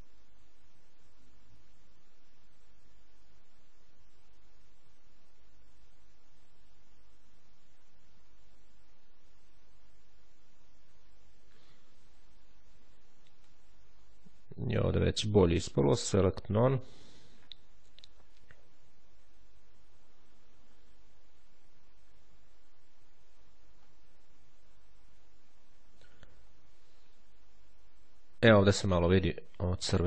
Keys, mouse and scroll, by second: 13.3-14.2 ctrl+scroll down 2, 15.7 click, 16.5 click, 17.7-18.1 ctrl+scroll up 1, 20.3-20.9 ctrl+scroll up 1, 23.6-24.1 ctrl+scroll down 3, 25.5-26.1 shift+scroll down 2, 26.7-27.3 shift+scroll down 2, 29.6 ctrl+z.